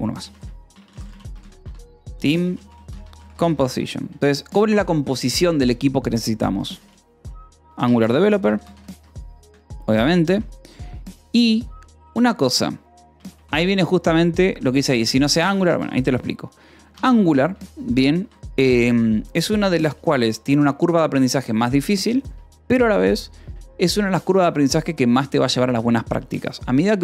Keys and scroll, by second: 0.6-4.4 typing, 6.5-9.8 typing, 10.7 ctrl+s, 12.9 l, 13.9 shift+v, 14.8 Escape, 16.2 shift+v, 16.7 Escape, 17.4 Escape, 17.7 l, 18.1 a, 18.6 Escape.